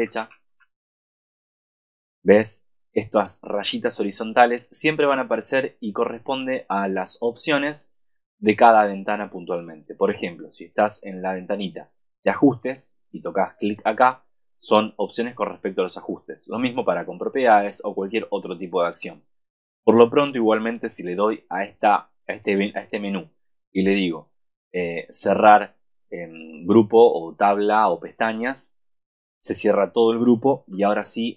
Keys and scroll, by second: 0.0 super+=.